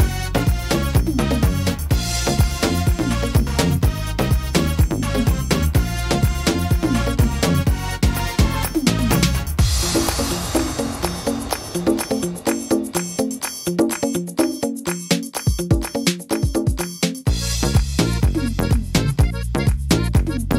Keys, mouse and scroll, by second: 0.3 middle click, 0.6-1.5 scroll down 5, 1.5 shift+middle click, 1.9 scroll down 2, 2.3 middle click, 2.8 shift+middle click, 3.3-3.8 scroll up 4, 3.8 middle click, 4.3 shift+middle click, 5.1 shift+middle click, 5.8 middle click, 6.4 shift+middle click, 8.5 click, 9.9 click, 20.0 click, 20.0 s.